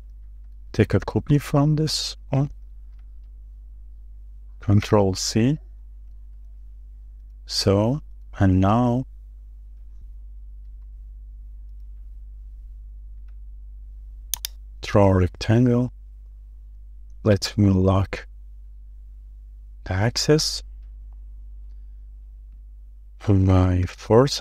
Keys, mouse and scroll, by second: 0.3 shift+middle click, 0.4-1.0 shift+scroll down 2, 1.1 shift+middle click, 1.7-2.3 scroll down 3, 2.3 shift+middle click, 6.4-6.8 scroll up 1, 7.0 scroll up 1, 7.1 shift+middle click, 7.3-7.9 shift+scroll down 1, 8.9-9.3 scroll up 1, 9.3 middle click, 10.1 scroll up 1, 10.4 shift+middle click, 10.7-11.0 shift+scroll down 2, 11.0 shift+middle click, 11.9 scroll up 1, 12.2 shift+middle click, 16.8 r, 23.3 typing, 24.3-24.4 typing.